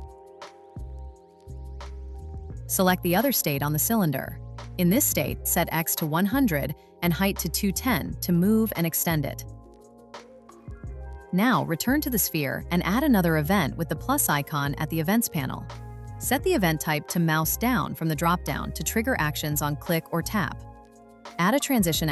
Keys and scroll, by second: 6.1 Return, 8.4 Return.